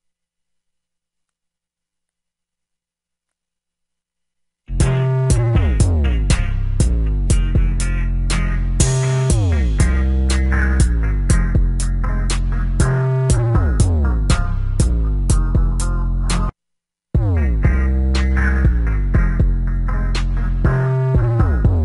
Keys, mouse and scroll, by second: 15.5 F1.